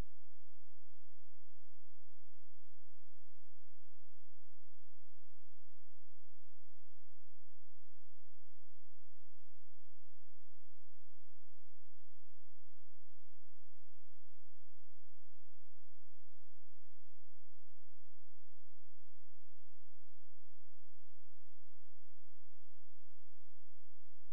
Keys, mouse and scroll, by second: 1.5 click, 5.5 scroll down 1, 5.7-6.8 scroll up 1, 8.5 click, 12.0 space, 14.4 click, 17.3 click.